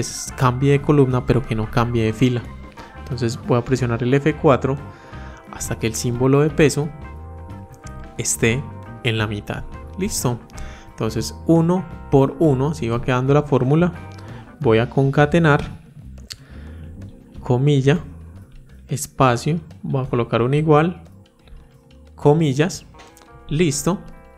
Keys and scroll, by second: 3.7 F4.